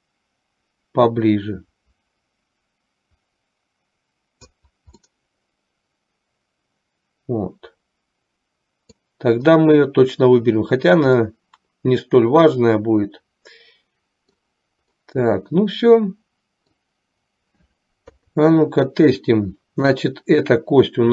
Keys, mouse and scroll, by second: 5.2-9.3 middle drag, 11.4 scroll up 1, 11.7-14.7 middle drag, 15.2 scroll up 1, 15.3-17.0 middle drag, 18.2 KP_3.